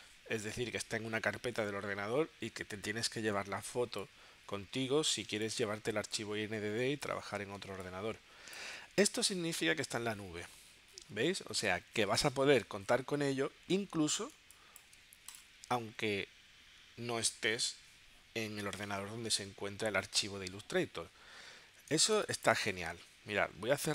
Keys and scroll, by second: 3.8 space, 7.6 space, 14.4 space, 22.0 space, 23.0 super+Tab.